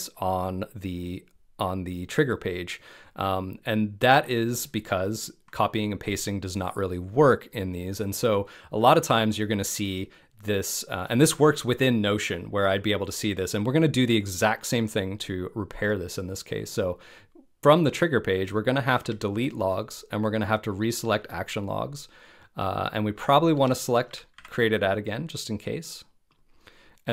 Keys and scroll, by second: 19.0 BackSpace, 23.5 BackSpace.